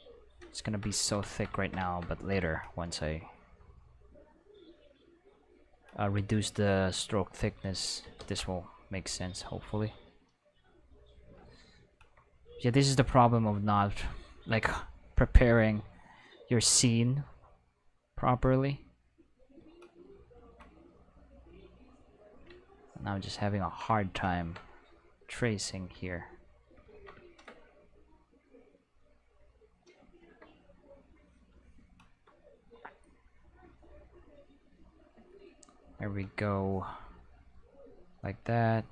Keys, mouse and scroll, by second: 0.7 ctrl+shift+middle click, 1.4 ctrl+shift+middle click, 1.7 ctrl+middle click, 3.5-4.8 drag, 6.4 click, 8.2 ctrl+z, 9.0 click, 10.5 click, 13.1 click, 15.1 click, 17.2-19.3 drag, 20.2 shift+middle click, 21.1-22.1 drag, 24.3 ctrl+middle click, 25.2 click, 27.4 middle click, 28.3-29.6 drag, 29.6 middle click, 30.1 shift+middle click, 31.0 click, 32.0 shift+middle click, 33.1-34.9 drag, 35.3-37.1 shift+middle drag, 37.1 alt+click, 38.5 alt+click.